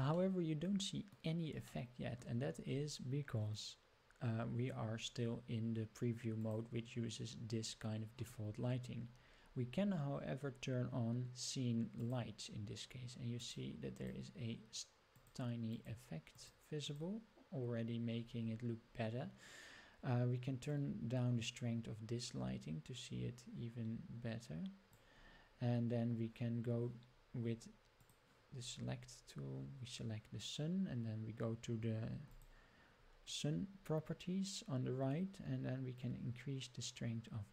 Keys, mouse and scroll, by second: 0.2-1.2 middle drag, 1.7-2.2 shift+middle drag, 6.4-25.3 drag, 28.0 click, 32.4 click, 36.0-37.5 drag.